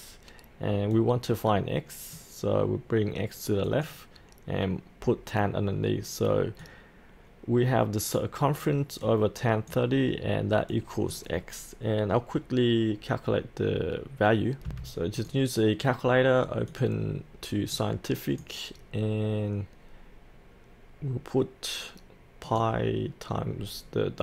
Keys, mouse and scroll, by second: 14.7 F8, 15.1-24.2 drag.